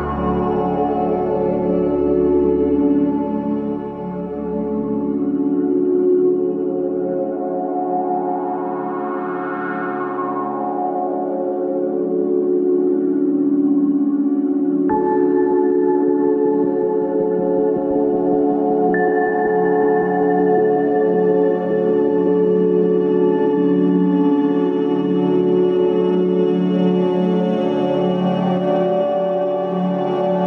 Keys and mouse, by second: 7.5 alt+z, 8.1 shift+middle drag, 9.9 g, 11.6 g, 14.9 Tab, 15.5 Tab, 16.1 g, 27.5 shift+d.